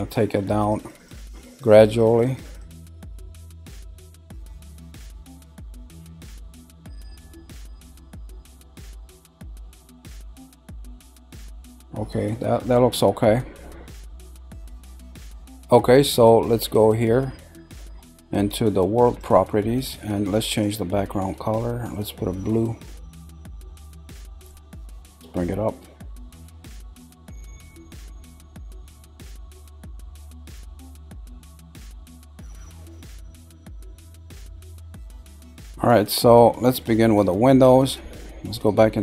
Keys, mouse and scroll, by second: 0.3-3.7 drag, 4.4-7.4 middle drag, 7.4 scroll up 1, 8.1 middle click, 8.9-13.0 middle drag, 13.0-13.6 scroll down 3, 13.6-14.5 middle drag, 19.0 click, 20.4 click, 30.8-31.6 middle drag, 31.6 scroll up 4, 32.2-33.0 shift+middle drag, 33.0 scroll down 1, 36.3-37.1 middle drag, 37.1-37.4 scroll up 2.